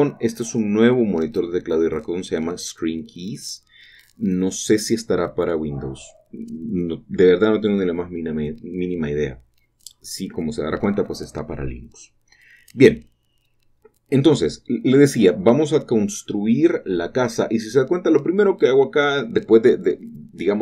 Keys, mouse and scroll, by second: 0.6 shift+middle click, 0.8 shift+click, 2.1-4.4 shift+middle drag, 4.4 shift+click, 4.6 typing, 5.6 shift+click, 6.1 shift+click, 10.2 click, 10.2 typing, 11.5-12.4 scroll down 1, 12.4 shift+middle click, 14.3-15.2 typing, 14.7 shift+middle click, 15.2 shift+middle click, 15.5-20.4 shift+middle drag, 20.4 click.